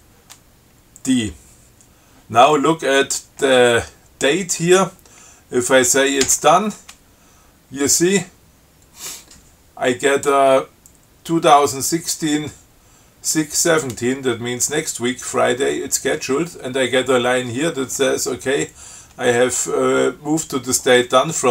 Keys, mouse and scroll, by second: 6.5 d.